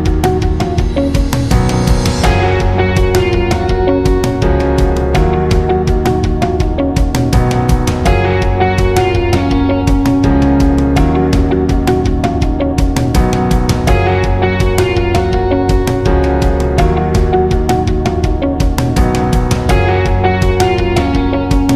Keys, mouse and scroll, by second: 5.9-10.0 drag, 9.0-10.0 drag, 10.3-12.4 drag, 14.2-16.4 shift+click.